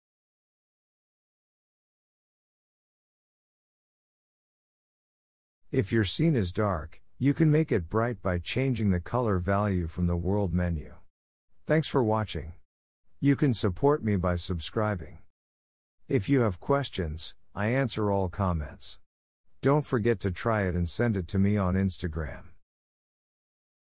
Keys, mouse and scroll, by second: 7.5 click, 8.4 click, 17.5 click, 19.1 click, 19.8 click.